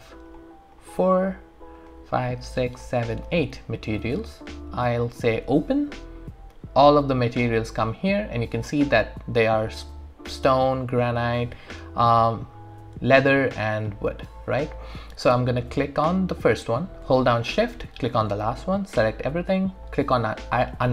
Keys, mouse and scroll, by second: 0.3 ctrl+click, 5.4 typing, 15.2 click, 17.7 shift+click.